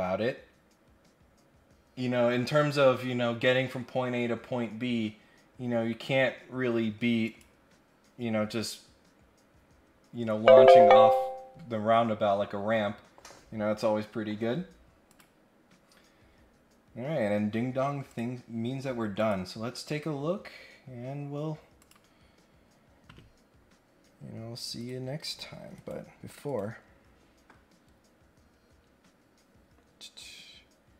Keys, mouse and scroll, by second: 7.2 click, 15.1 click, 18.1 click, 19.1 click, 21.8 click, 24.8 click, 25.2 right click, 25.7 right click, 26.5 right click.